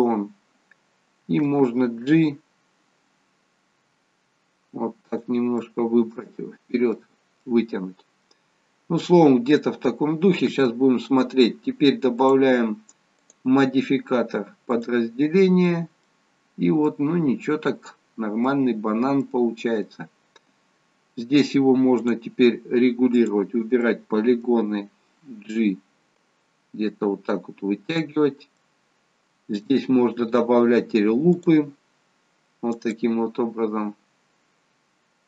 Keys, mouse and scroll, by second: 2.1 g, 5.7 middle click, 7.6 middle click, 8.6-9.6 scroll down 2, 9.6 middle click, 9.6-10.5 scroll down 1, 12.2 click, 13.4 click, 15.7 middle click, 16.4-17.4 scroll up 2, 16.9 middle click, 19.3 middle click, 22.0 click, 23.9 middle click, 25.5 g, 31.4 click.